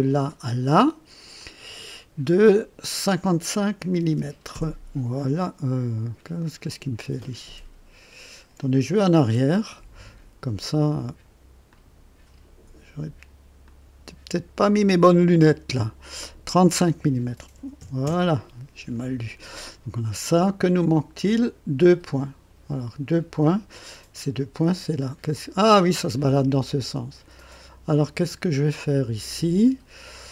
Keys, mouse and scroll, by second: 0.0 click, 1.4 click, 4.0 KP_5, 4.1 KP_5, 4.5 Return, 6.3 scroll down 1, 9.0 ctrl+z, 11.7 click, 13.6 click, 15.0 click, 17.8 KP_5, 18.0 KP_Enter, 22.1 click, 23.4 click, 24.6-25.3 drag.